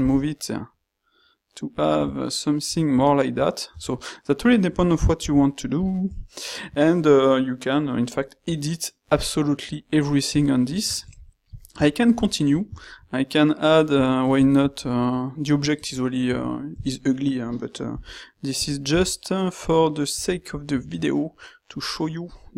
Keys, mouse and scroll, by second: 0.1 g, 5.4 g, 15.8 q, 18.0 g, 18.9 s.